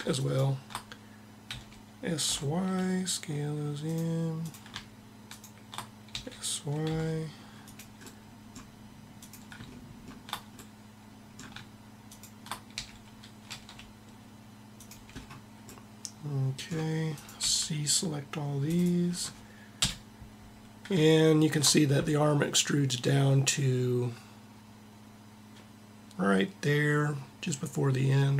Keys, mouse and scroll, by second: 1.4 s, 3.6-6.8 drag, 5.9 s, 7.4 click, 12.5 s, 13.6 middle click, 13.7 scroll up 1, 14.8 middle click, 15.5-16.8 middle drag, 16.8 click, 17.2 c, 17.3 c, 19.4 KP_1.